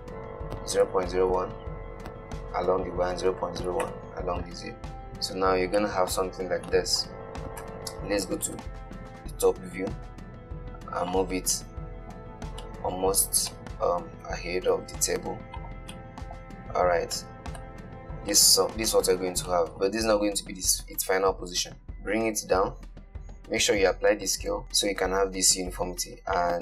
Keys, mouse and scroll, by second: 5.4-6.2 scroll up 9, 6.2-7.9 shift+middle drag, 7.9 KP_7, 8.9 shift+middle click, 9.7 g, 11.8-13.5 middle drag, 13.5 scroll down 2, 13.8-14.5 middle drag, 14.5 g, 16.2-16.8 middle drag, 16.8-17.5 scroll up 2, 17.5-20.5 shift+middle drag, 20.5 g, 21.8-23.1 middle drag, 24.1 ctrl+a.